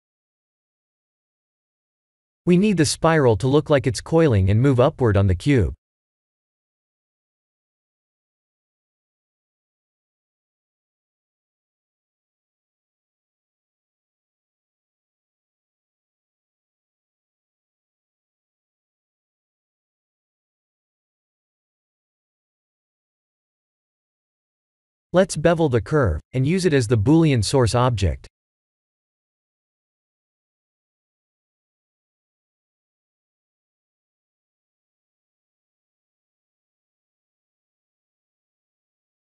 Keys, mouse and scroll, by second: 6.8 click, 8.9 click, 10.6 middle click, 13.6 click, 14.0 click, 14.6 click, 15.5 middle click, 20.0 shift+click, 23.4 click, 24.0-24.7 scroll down 10, 25.5 shift+click, 29.2 scroll up 3, 29.8 middle click, 36.3-36.9 scroll down 3, 36.9 middle click, 38.7 Tab.